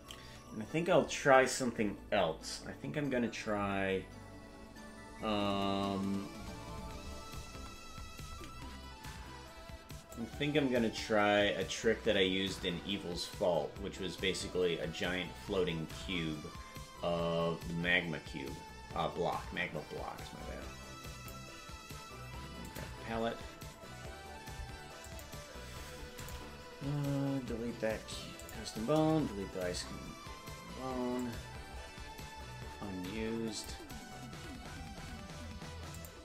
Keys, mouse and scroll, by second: 1.8-3.2 scroll up 6, 6.8-8.6 scroll up 38, 10.1-21.3 drag, 22.6 click, 25.0 click, 26.1 click, 27.9 Delete, 28.4 click, 29.6 Delete, 31.2-34.1 drag, 31.6-32.1 scroll down 10, 35.9 click.